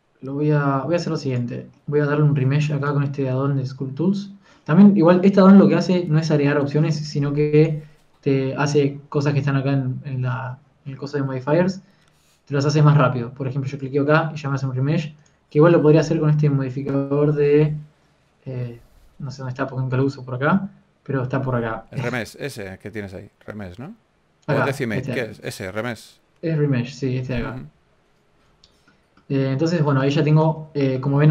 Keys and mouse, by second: 0.8-5.7 drag, 8.3-11.2 drag, 14.6-18.1 drag, 29.8-31.3 middle drag.